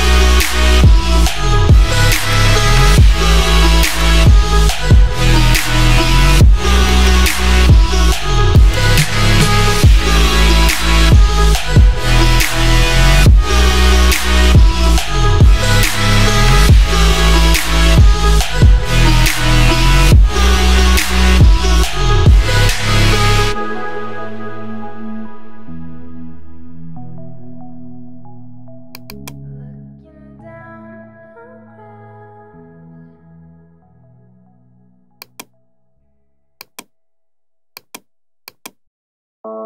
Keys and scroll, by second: 29.7-30.7 typing, 39.3 ].